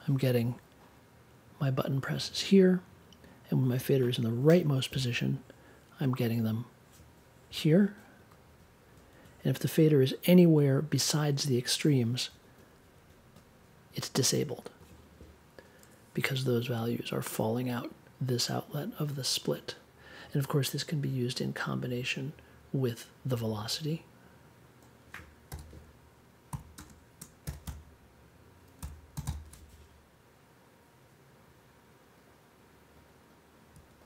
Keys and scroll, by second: 25.5 n, 26.7-29.1 typing.